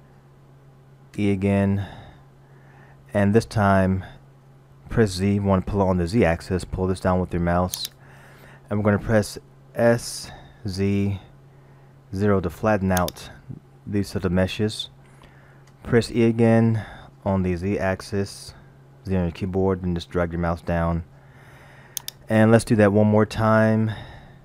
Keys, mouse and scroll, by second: 0.1-0.4 scroll down 2, 1.2 e, 9.9 s, 15.7 e.